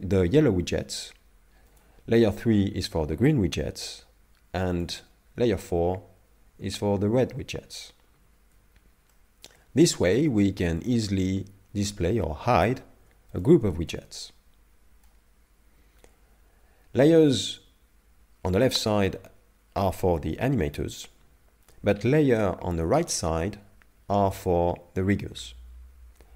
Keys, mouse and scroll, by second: 1.7 click, 2.4 a, 2.7 a, 3.0 a, 4.8 click, 5.4 a, 5.7 a, 8.2 a, 9.1 shift+middle click, 10.8 click, 13.4 shift+click, 13.9 middle click.